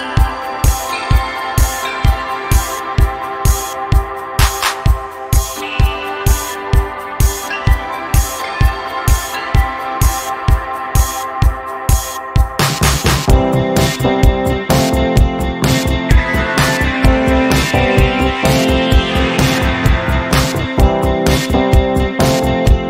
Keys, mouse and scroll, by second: 8.9 ctrl+scroll down 1, 9.4 ctrl+scroll up 1, 10.4-11.7 drag, 15.9 ctrl+scroll down 1, 16.3 ctrl+scroll up 1, 17.0 ctrl+scroll up 1, 17.8-19.0 click, 19.0 space, 20.1 click, 20.3-20.6 space, 20.9 v, 21.7-22.8 drag.